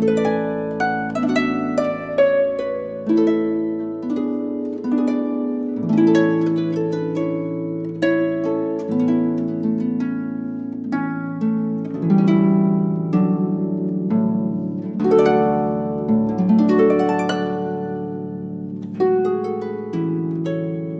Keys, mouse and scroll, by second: 0.5 a.